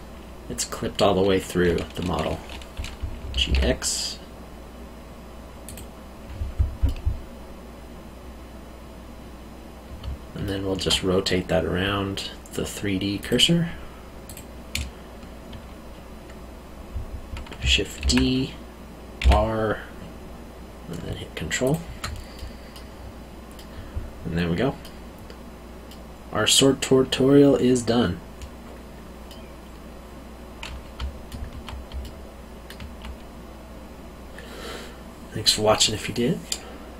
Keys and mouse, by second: 3.3 g, 3.4 x, 5.6 click, 6.8 middle click, 10.0 alt+middle click, 13.2 click, 18.0 shift+d, 19.2 r, 21.6 ctrl+click, 22.3 middle click, 25.8 middle click, 29.2 middle click, 30.9 alt+middle click, 32.0 alt+middle click.